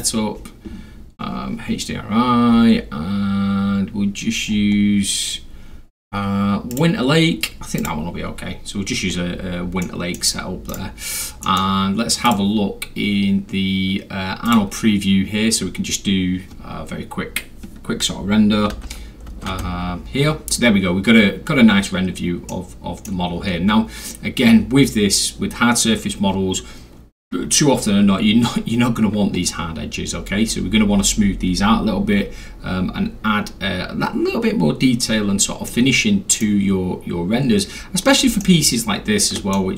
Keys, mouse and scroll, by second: 2.5-2.9 scroll down 3, 4.5-5.8 scroll up 2, 5.8 scroll, 5.8 scroll down 2, 6.1 scroll, 6.1 scroll down 2, 6.3-6.7 scroll, 6.7 click, 7.8 click, 9.8 middle click, 10.7 right click, 11.4 middle drag, 12.3 click, 14.5 click, 18.8 F3, 19.6 F4, 22.5 middle click, 23.9-24.2 scroll up 2, 25.5 scroll, 29.5 scroll down 2, 30.1 scroll down 2, 35.1 scroll down 2, 35.7-36.4 middle drag, 36.4 scroll, 38.4 alt+middle click, 39.5-39.7 alt+middle drag.